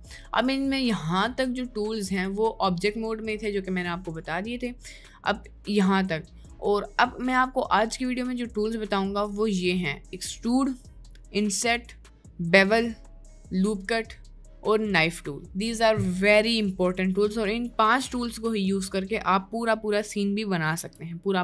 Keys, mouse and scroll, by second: 20.8 Tab.